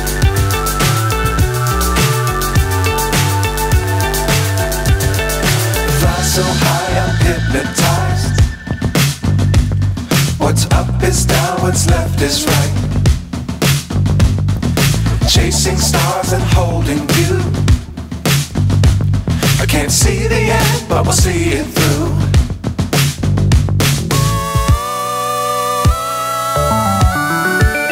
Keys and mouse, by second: 1.0-2.9 drag, 4.9-5.9 drag, 6.3 click, 7.9-8.9 drag, 9.3-10.9 drag, 11.6-14.1 drag, 14.4-16.0 drag, 17.4-18.9 drag, 20.1 click, 20.9 click, 23.4-27.9 drag.